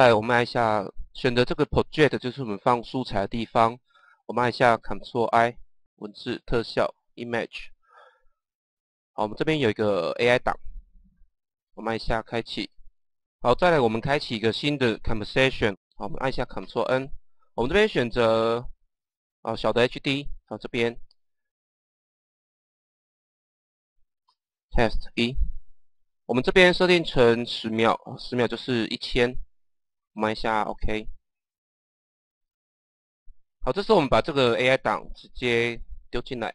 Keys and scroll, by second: 15.8 ctrl+n, 16.5 ctrl+n, 23.0-25.0 typing, 28.1 KP_1, 28.3 KP_0.